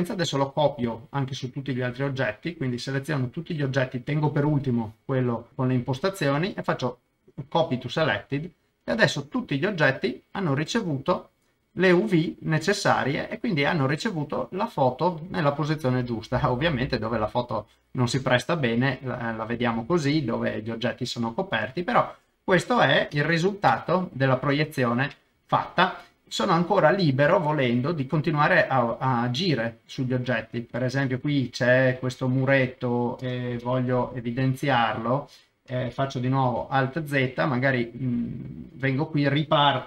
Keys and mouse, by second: 1.7 shift+click, 5.9-8.1 drag, 11.2 click, 12.2-16.1 middle drag, 16.6 middle click, 17.5 middle click, 18.9-20.0 middle drag, 20.7 middle click, 22.1 KP_0, 23.1 ctrl+s, 24.1 middle click, 25.3 KP_0, 28.4-29.8 middle drag, 30.4 KP_0, 30.7 h, 32.1 h, 32.7 click, 33.9 alt+h, 34.7 Tab, 36.5 alt+z, 37.3 click, 38.2 shift+click, 38.9 click.